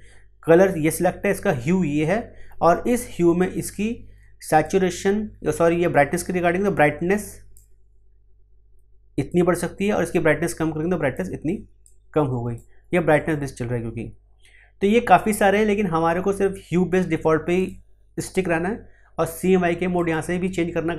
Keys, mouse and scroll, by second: 4.6-13.1 drag, 17.5 click, 19.9 click.